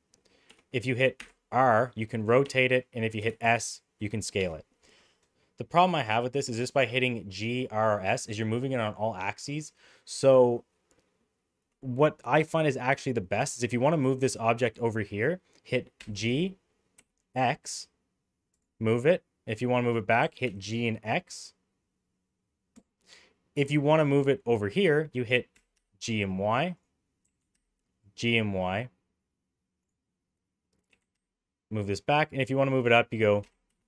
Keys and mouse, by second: 1.1 r, 3.1 s, 12.5 middle click, 15.9 g, 20.2 g, 25.5 g, 27.2 g, 30.8 g, 33.4 g.